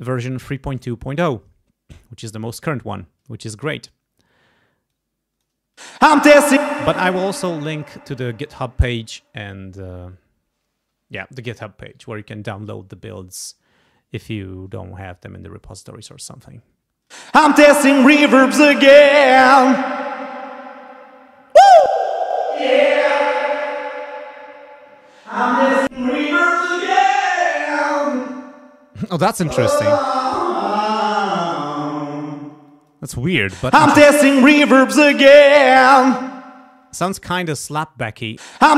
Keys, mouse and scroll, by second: 4.9 click, 5.7 space, 6.6 space, 17.0 space, 21.8 click, 22.3 click, 25.9 click, 30.4-31.4 drag, 32.3 space, 32.7 click, 33.4 space, 34.6 click, 35.6 click, 36.9 space, 38.3 space.